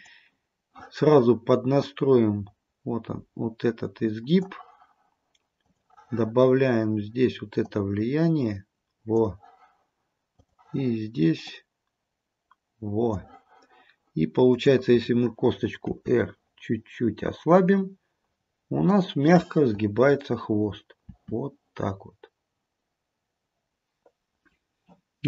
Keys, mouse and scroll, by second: 0.0 click, 1.9 click, 5.7 click, 7.8 click, 10.4 click, 11.5 click, 14.6 click, 16.1 r, 21.2 r, 23.7-24.5 scroll down 1.